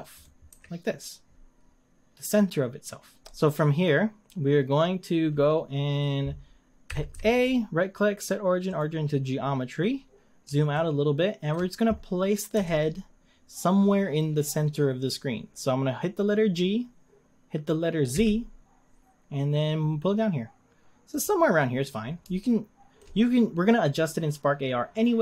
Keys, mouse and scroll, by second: 0.2 click, 0.5 r, 3.2 shift+middle click, 3.2 scroll down 2, 4.3-6.5 scroll up 1, 6.9 a, 7.1 a, 8.8-9.3 right drag, 9.3-10.7 scroll down 5, 10.7-12.6 shift+middle drag, 12.6 g, 21.6-22.4 scroll up 4, 22.4-23.2 shift+middle drag, 23.2-24.4 scroll up 3, 24.4-24.9 scroll up 2, 24.9-25.2 middle drag.